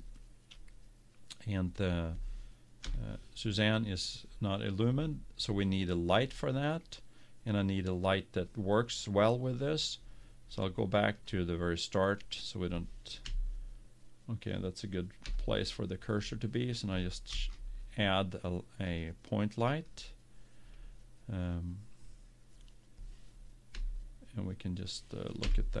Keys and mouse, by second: 3.1 KP_7, 11.5-13.1 drag, 13.4 KP_1, 15.3 KP_7, 17.5 shift+a, 23.9 KP_1.